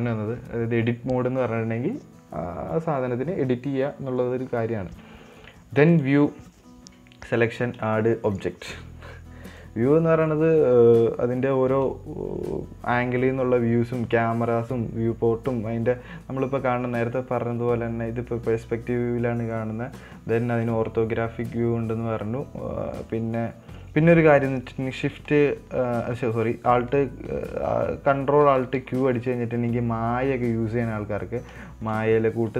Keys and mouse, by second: 5.3 Tab, 6.3-9.3 drag, 10.0-17.4 drag, 29.2 ctrl+alt+q, 30.6-31.9 middle drag, 32.1 shift+middle drag.